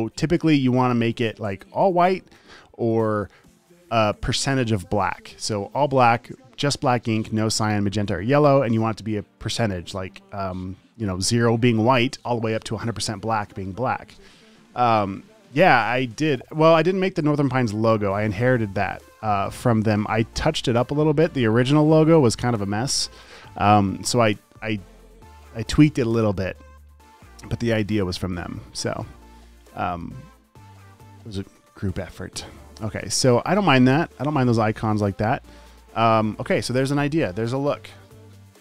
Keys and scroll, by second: 36.9 space, 38.1 super+s, 38.3 space.